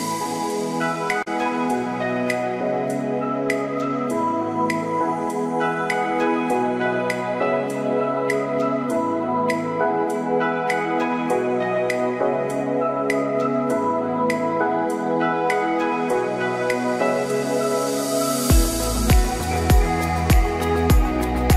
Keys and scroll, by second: 14.7 ctrl+t.